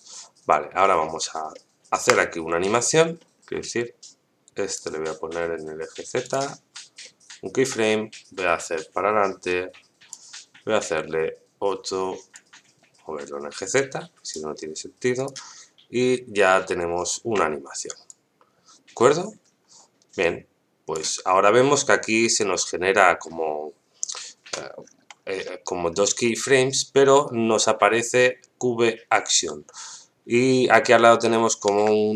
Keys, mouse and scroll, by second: 1.5-2.0 shift+middle drag, 2.3-2.6 scroll up 1, 3.0 scroll up 3, 3.2 shift+middle click, 4.7 click, 6.2 click, 7.0-7.5 shift+middle drag, 8.6-10.1 drag, 12.3-14.4 drag, 15.1 click, 17.0 shift+middle click, 18.0-20.9 drag, 24.8 scroll up 1, 25.4 middle click, 25.4-25.8 scroll up 3, 26.2 scroll up 1.